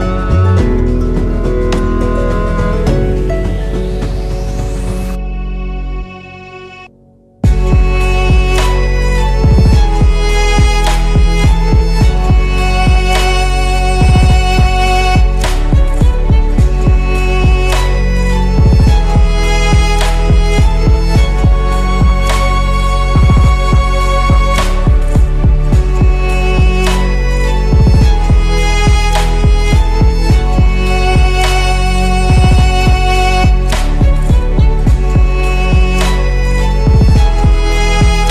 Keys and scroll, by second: 2.4 ctrl+s, 8.4 F2, 10.9 Tab, 17.3 Tab, 22.2 ctrl+z, 23.7 Tab, 27.8 Tab, 30.8 Tab, 36.6 Tab.